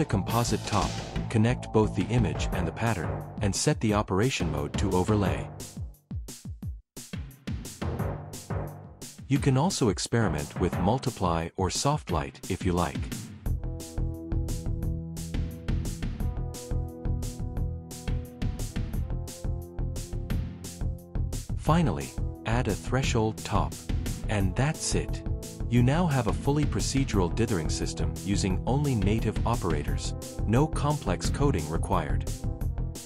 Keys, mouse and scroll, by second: 0.2 click, 1.4 click, 1.9-3.5 typing, 4.5 click, 7.1 click, 7.4 click, 8.2 click, 9.1 click, 10.0 click, 20.9 right click, 24.5 click.